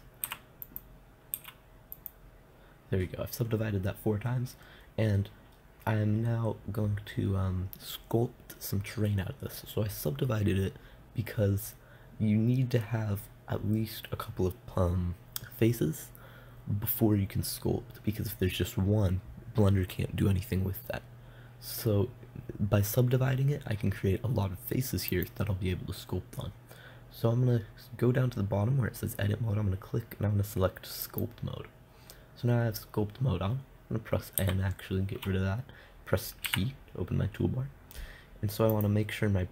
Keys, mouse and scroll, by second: 0.7 w, 1.8 w, 25.6-27.4 drag, 34.8 n, 36.9 t, 39.4 t.